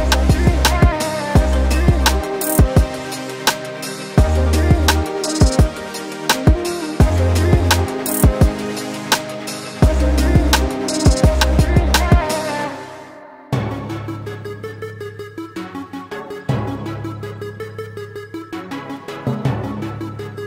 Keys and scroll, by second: 4.5 ctrl+shift+], 5.4 t, 10.3 ctrl+t, 14.0 ctrl+z, 16.5 BackSpace, 19.4 a.